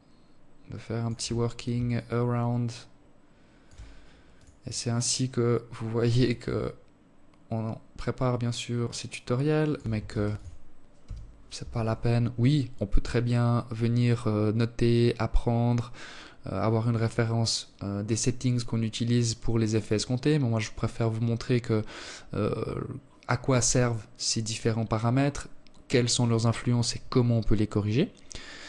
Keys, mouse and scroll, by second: 0.2 shift+click, 2.6 click, 4.5 shift+click, 8.3 ctrl+s.